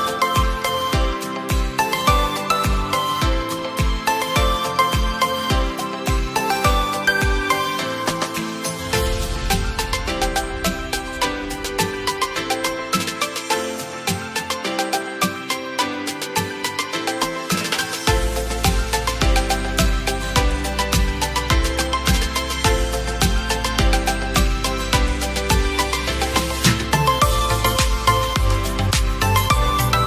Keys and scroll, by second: 8.2 ctrl+q.